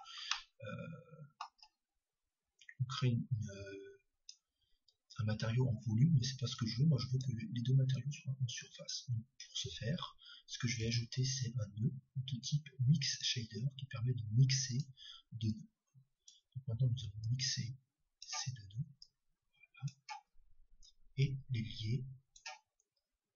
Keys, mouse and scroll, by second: 0.3-3.3 middle drag, 3.3-5.8 drag, 6.6-10.8 drag, 10.8 shift+a, 15.6-23.3 drag.